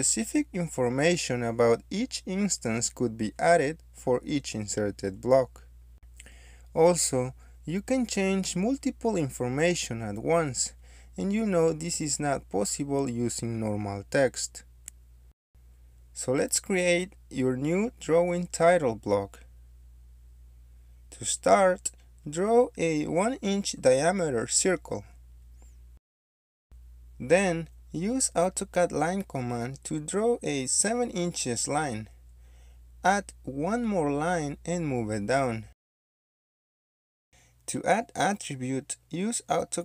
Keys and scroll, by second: 3.5 ctrl+a, 6.1 Escape, 10.5 BackSpace, 11.2 2, 14.3 Escape, 22.9 c, 23.3 space, 25.5 d, 26.2 Return, 27.3 1, 27.6 Return, 28.7 1, 28.9 space, 31.7 7, 32.0 Return, 32.8 Escape, 33.5 l, 33.8 space, 36.0 Escape, 36.1 ctrl+z, 36.1-37.2 typing.